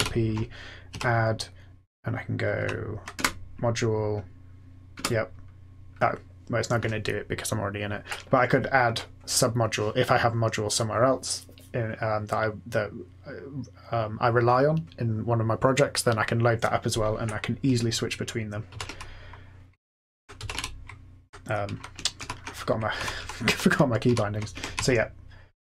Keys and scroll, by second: 0.9 a, 2.5 Right, 3.1 Return, 4.9 Return, 18.7 ctrl+x, 18.8 o, 20.3 ctrl+x, 20.5 o, 22.1 ctrl+F8, 22.9 Up, 23.1 Up, 23.4 Down, 24.0 Up, 24.7 Up, 25.2 Up, 25.2-25.6 Up.